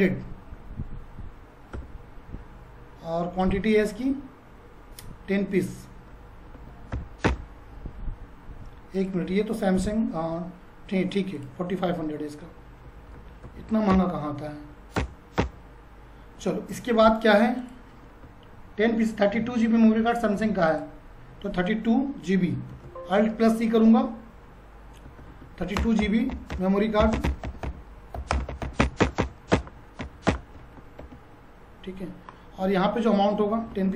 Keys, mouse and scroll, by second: 3.4 click, 6.5-6.9 typing, 7.3 Return, 8.9 click, 11.4 click, 12.6-14.1 typing, 17.6 click, 20.7 click, 22.7 alt+c, 24.8-29.3 typing, 30.0 Down, 30.3 Return, 31.0 ctrl+a, 33.7-33.9 typing.